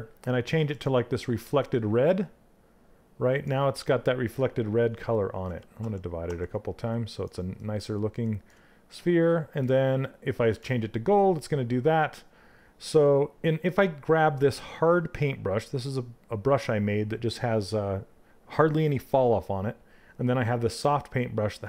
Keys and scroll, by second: 5.0 ctrl+d.